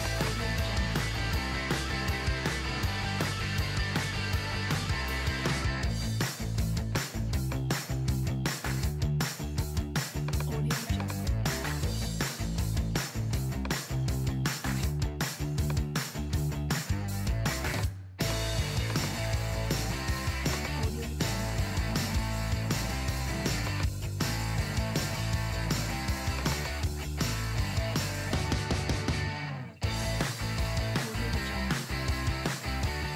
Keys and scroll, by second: 11.8 BackSpace.